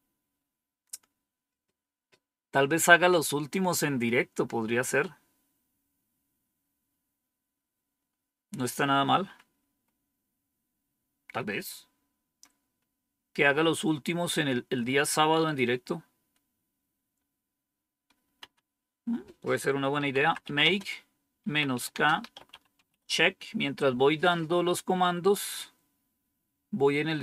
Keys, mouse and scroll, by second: 9.6 Up, 18.3 Down, 19.7-23.3 typing.